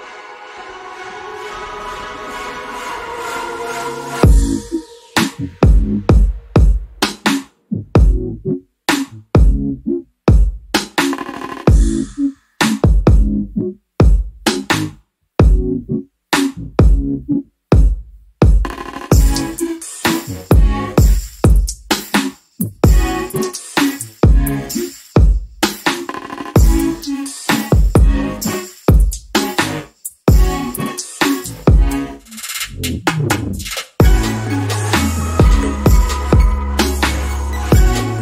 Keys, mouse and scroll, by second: 0.0 alt+scroll up 1, 0.1 middle click, 0.8-1.4 scroll up 1, 1.6 click, 3.0 click, 3.0 alt+middle click, 3.4 scroll down 1, 6.0-6.9 scroll up 1, 6.9 alt+middle click, 10.1 alt+click, 11.5 middle click, 11.9 scroll up 1, 12.2 alt+click, 15.4 double click, 16.0 click, 17.0 alt+middle click, 17.4 alt+click, 20.0 right click, 21.0 click, 37.0 middle click, 37.7-38.1 scroll up 1.